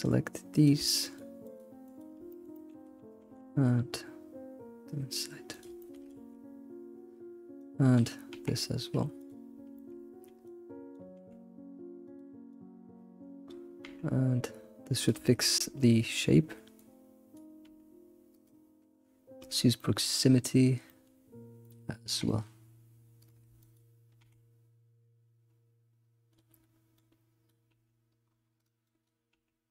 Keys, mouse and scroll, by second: 0.0 click, 0.7 click, 1.4 drag, 2.0 shift+click, 2.3 middle click, 2.5 middle click, 3.2 g, 5.8 shift+middle click, 6.3 alt+x, 7.6 click, 8.3 g, 8.5 g, 9.6 scroll down 2, 9.8 shift+middle click, 10.2 scroll up 3, 10.4 click, 11.2 g, 12.5 click, 13.8 g, 15.3-16.8 shift+middle drag, 16.8 click, 17.3 click, 17.7 g, 17.9 g, 19.8-21.6 middle drag, 21.6 click, 22.1 g, 23.7 ctrl+click, 24.7 g, 27.5 click, 27.7 g, 28.8 click, 29.3 g.